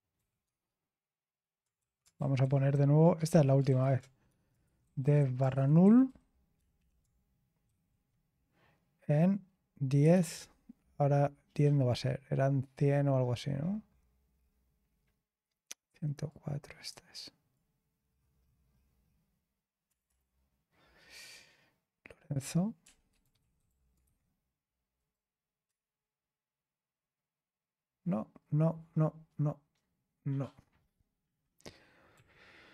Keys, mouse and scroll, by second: 0.1 typing, 1.8 ctrl+a, 2.1 alt+f, 2.4 alt+f, 2.7 alt+f, 4.0-4.8 typing, 5.8-7.6 typing, 9.7-11.1 typing, 11.1-16.2 scroll up 1, 16.2-17.8 drag, 18.1-18.8 scroll down 1, 19.6-20.5 typing, 22.5-24.5 typing, 25.6 Return, 32.1 typing.